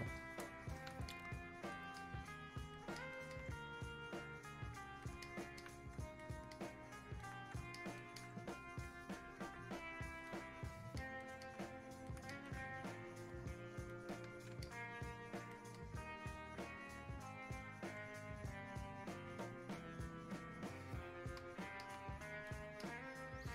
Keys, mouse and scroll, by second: 0.2 click, 1.1 alt+click, 2.0 alt+click, 3.0-5.3 alt+drag, 5.3-12.3 alt+drag, 13.3-15.8 drag, 15.8-21.8 drag, 21.8 alt+click, 22.8-23.5 drag.